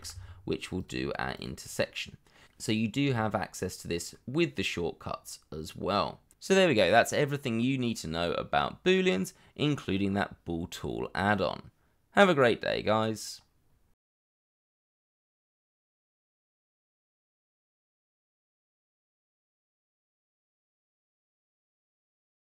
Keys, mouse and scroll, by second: 1.6 scroll down 1, 1.9 middle click, 2.6 scroll down 1, 3.7 shift+middle click, 4.0 scroll down 1, 4.4 middle click, 6.0 scroll down 1, 6.4 shift+middle click.